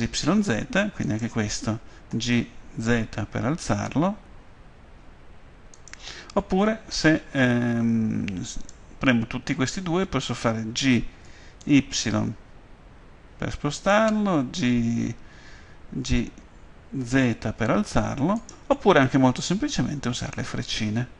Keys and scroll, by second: 2.1 g, 2.9 z, 11.2 g, 11.6 y, 17.3 z.